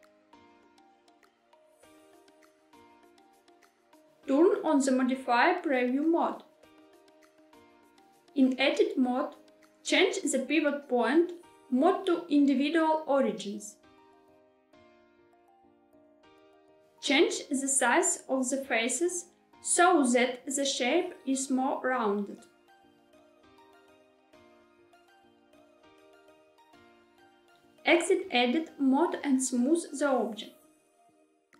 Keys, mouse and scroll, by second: 1.4-3.7 drag, 5.3 click, 8.2 Tab, 12.3-16.5 drag, 17.8 s, 26.9 click, 29.1 Tab.